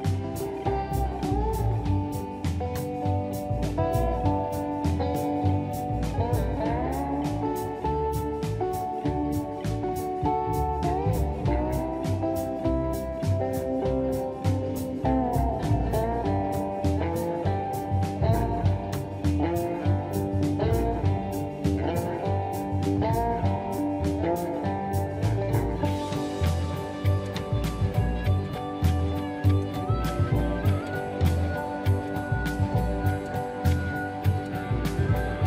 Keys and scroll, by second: 31.1 space, 33.6 m.